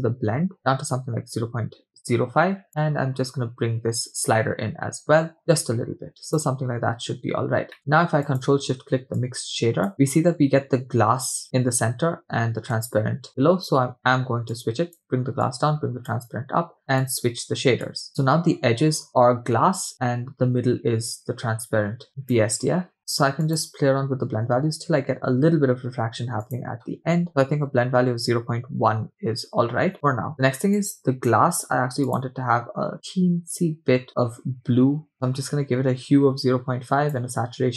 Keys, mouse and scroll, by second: 2.7 click, 6.9-7.7 scroll down 2, 7.7 scroll down 1, 7.8 middle click, 8.5 ctrl+shift+click, 9.2 click, 9.9 middle click, 10.1-10.7 scroll up 4, 12.8 click, 14.5 click, 15.5 click, 17.1 click, 19.3-19.9 scroll up 2, 19.9-20.3 scroll down 1, 22.6 click, 23.0 middle click, 23.4-27.3 drag, 29.9-30.3 scroll down 2, 30.3 scroll up 1, 30.8 click, 32.1 click.